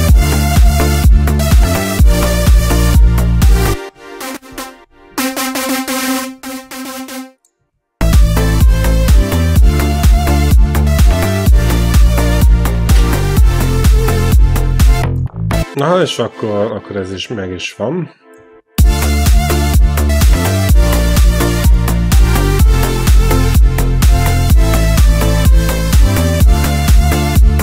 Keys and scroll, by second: 2.2 alt+Right, 3.5 space, 3.9 q, 4.7 ctrl+l, 5.0 q, 7.7 q, 7.8 space, 15.4 space, 18.6 space, 23.8 ctrl+b.